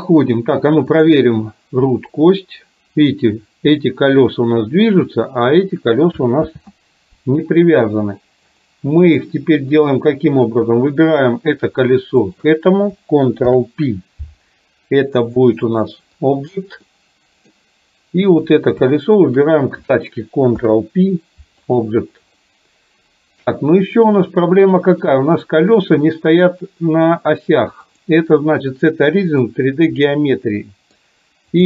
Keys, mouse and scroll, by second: 1.0 click, 2.2-5.4 drag, 6.5 ctrl+z, 8.6-9.2 drag, 9.6-10.0 middle drag, 10.5 click, 12.4 shift+click, 13.5 ctrl+p, 17.0-17.5 middle drag, 20.6 ctrl+p, 22.5-23.6 middle drag, 24.7 middle click, 25.7 click, 27.9-29.6 drag, 30.1 middle click.